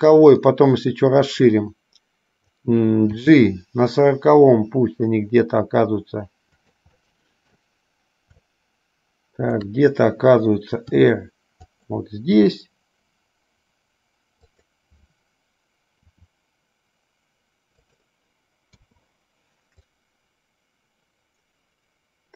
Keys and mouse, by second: 0.7-2.9 drag, 3.5 g, 7.2 middle click, 8.7-10.0 shift+middle drag, 11.1 r, 12.7 g, 16.2 r, 19.1 i, 20.1-22.3 drag.